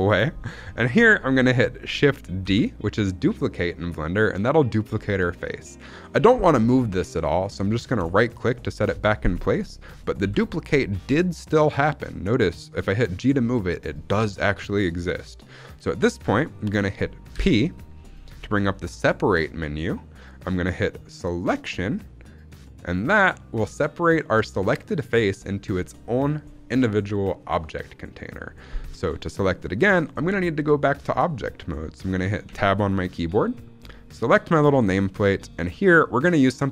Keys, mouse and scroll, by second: 0.3-0.6 scroll down 1, 0.6 middle click, 2.3 shift+d, 7.9-10.1 right drag, 10.1 g, 15.7 right click, 17.2 p, 29.1 shift+middle click, 31.3 middle click, 32.4 Tab, 34.1 click, 34.7 shift+middle drag, 35.3 scroll up 2, 35.4 middle click.